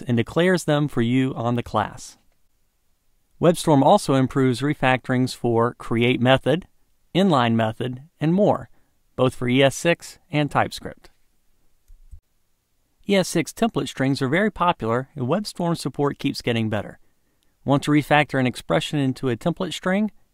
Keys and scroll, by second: 18.8 alt+Return.